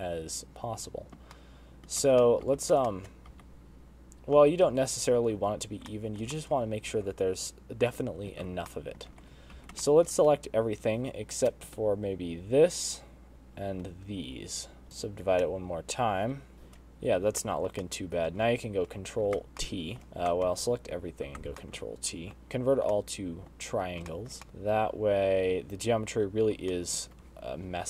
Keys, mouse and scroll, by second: 0.9 middle click, 2.2 middle click, 3.0 Tab, 3.1 middle click, 3.4 Tab, 3.8 shift+middle click, 4.2 Tab, 5.3 Tab, 5.6 a, 6.8 middle click, 7.3 shift+middle click, 7.9 alt+a, 9.3 alt+h, 9.6 middle click, 10.1 alt+a, 10.3 scroll up 1, 10.8 shift+middle click, 11.2 scroll up 2, 12.6 shift+l, 13.3 shift+l, 14.4 shift+l, 14.8 shift+l, 14.9 middle click, 14.9 scroll down 1, 14.9 shift+l, 15.6 right click, 16.4 middle click, 18.0 middle click, 18.4 shift+middle click, 18.8 middle click, 20.0 ctrl+t, 20.0 shift+middle click, 20.7 ctrl+z, 21.0 middle click, 21.5 a, 22.5 ctrl+t, 22.6 middle click, 23.5-23.9 scroll up 2, 23.9 middle click, 24.4 shift+middle click, 24.4 scroll down 3, 27.7 shift+middle click.